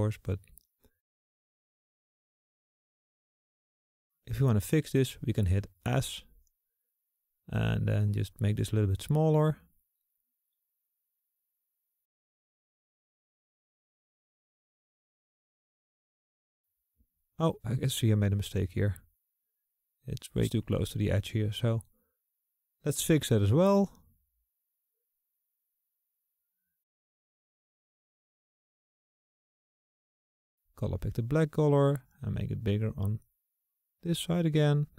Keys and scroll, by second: 8.5 s, 31.2 s.